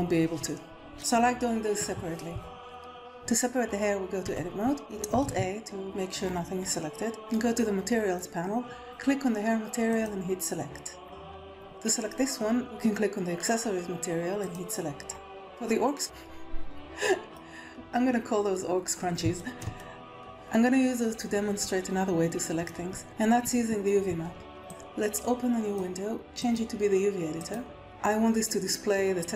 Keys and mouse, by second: 0.9 click, 0.9 middle click, 0.9 right click, 3.0 Tab, 4.2 Tab, 5.2 alt+a, 9.8 click, 16.0-17.3 middle drag, 19.3 shift+middle click, 19.7 middle click, 20.1-25.7 drag, 26.4-27.5 drag.